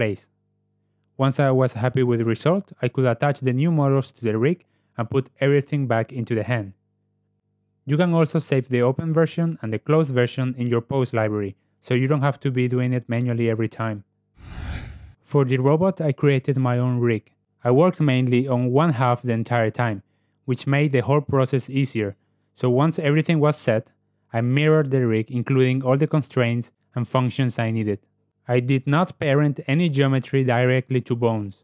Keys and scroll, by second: 1.0 r, 3.1 g, 5.7 g, 7.0 g, 24.3 Tab.